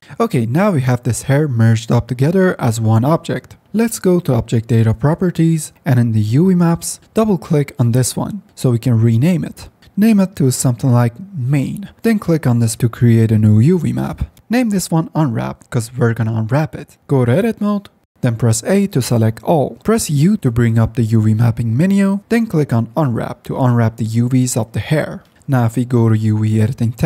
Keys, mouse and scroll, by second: 0.0 F9, 0.7 drag, 1.1 Tab, 2.4 Tab, 14.8 p, 18.0 Tab, 18.5 a, 20.5 u.